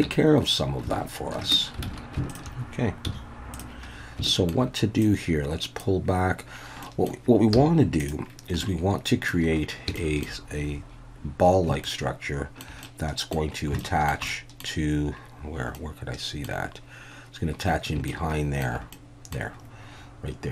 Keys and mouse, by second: 0.1 Tab, 1.8 alt+a, 2.3 alt+shift+drag, 3.1 z, 4.2 shift+click, 5.0 click, 6.8 middle click, 7.5 z, 8.6 middle click, 10.0 shift+middle click, 11.8 shift+middle click, 12.8 middle click, 13.8 shift+middle click, 14.3 middle click, 15.8 middle click, 18.1 shift+middle click, 18.9 middle click.